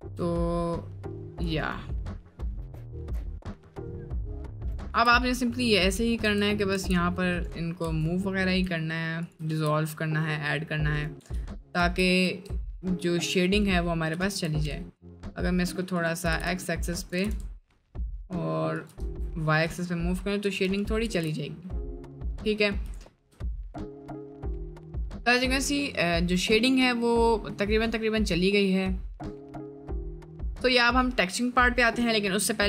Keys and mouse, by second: 0.4-1.1 middle drag, 1.7 middle drag, 2.1-2.5 middle drag, 2.9 middle drag, 3.3-4.1 middle drag, 4.4 middle drag, 4.9 Tab, 5.2 middle click, 5.9 middle click, 6.2 1, 6.7 g, 7.9 g, 9.6 g, 11.3 g, 11.8 g, 14.1 g, 16.2 g, 17.1 g, 19.0 Tab, 19.6 middle click, 21.1 ctrl+z, 21.9 middle click, 22.3 middle click, 23.1 shift+middle drag, 23.4 middle click, 25.4-26.1 middle drag, 26.6 middle drag, 27.4 middle click, 28.0 middle click, 28.6-29.0 middle drag, 29.3-30.3 middle drag, 30.5 middle click.